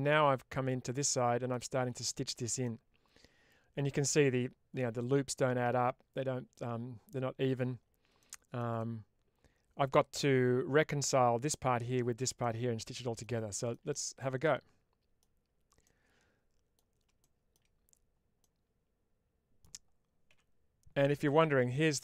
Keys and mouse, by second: 0.9 middle click, 2.5-4.0 middle drag, 8.1 shift+middle click, 8.6-10.0 middle drag, 12.3 middle click, 13.4 shift+middle click, 13.8-15.1 middle drag, 15.7 middle click, 18.3-19.5 middle drag, 20.2 1.